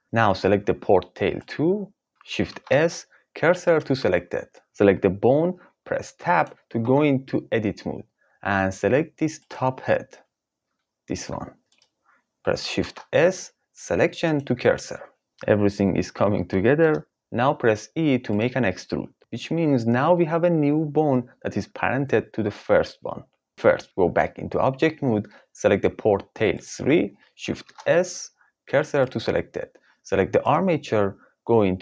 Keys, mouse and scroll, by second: 1.4 click, 2.5 shift+s, 6.8 Tab, 10.7 g, 11.6 click, 12.7 shift+s, 17.2 e, 17.3 click, 19.0 click, 23.5 Tab, 24.3 Tab, 26.5 click, 27.5 shift+s, 30.4 click.